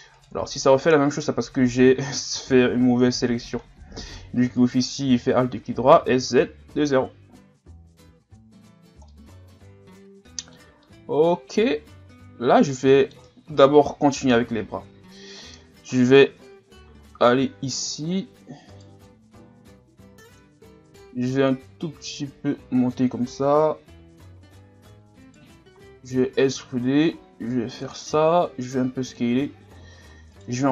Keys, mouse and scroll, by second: 0.7-1.2 scroll down 3, 1.2 scroll up 1, 1.5 scroll down 1, 2.2-2.8 scroll down 11, 3.0 scroll up 1, 3.6 scroll up 6, 4.6 alt+right click, 5.9 s, 7.3 a, 7.9 Tab, 8.4 scroll down 5, 9.1-13.7 middle drag, 13.7 KP_1, 14.4-15.0 scroll down 4, 15.0-16.0 scroll up 3, 16.0 right click, 16.3 Tab, 16.6-17.0 scroll down 1, 17.3-17.6 scroll up 6, 18.7 alt+right click, 19.7-21.0 drag, 21.0 alt+right click, 21.5-23.6 drag, 23.6-24.3 scroll up 2, 25.2 alt+right click, 26.0 e, 27.1-28.1 drag, 28.1 s, 29.5 scroll up 1, 30.1 e.